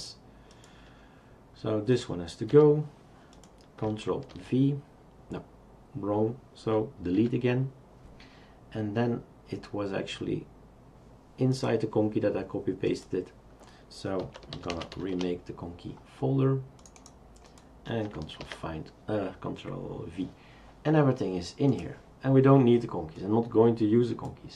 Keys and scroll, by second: 2.5 Delete, 4.3 ctrl+v, 7.2 Delete, 14.0-15.4 typing, 18.4 ctrl+v.